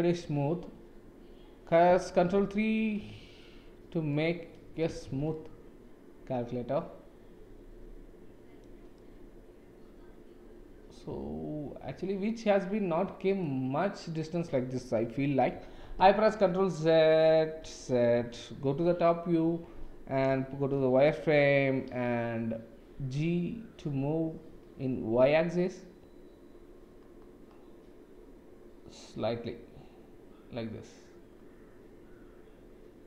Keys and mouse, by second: 2.8 ctrl+3, 4.1-4.8 drag, 5.1 shift+z, 5.3-7.9 drag, 7.9 middle click, 8.9-13.3 middle drag, 16.1 ctrl+z, 16.4 ctrl+z, 18.1 ctrl+z, 18.7 KP_7, 20.5 shift+z, 22.9 g.